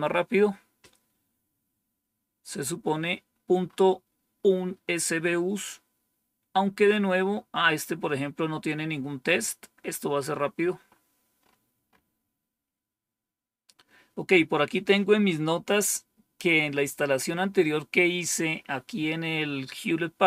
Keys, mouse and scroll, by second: 2.5-3.2 scroll down 1, 5.8-6.7 scroll down 1, 6.9-7.7 scroll down 1, 9.9-10.3 scroll down 1.